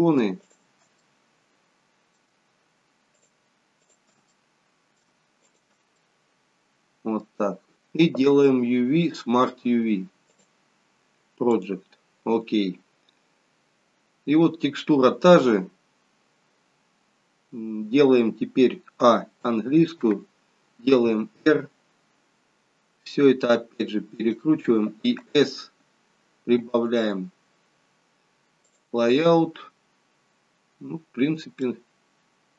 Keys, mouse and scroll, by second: 29.1 click, 30.8-31.6 scroll down 2, 31.6 middle click.